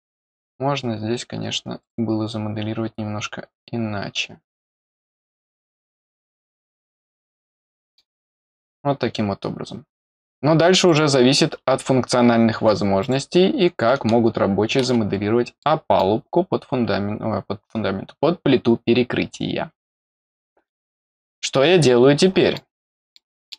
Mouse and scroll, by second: 0.3 click, 1.7 click, 5.1 click, 6.7 click, 7.6 middle click, 8.2 click, 10.8 click, 12.9 click, 13.8-14.8 middle drag, 14.9-15.2 scroll down 1, 15.5 middle click, 20.5-20.8 scroll down 3, 21.7 middle click, 23.1 middle click.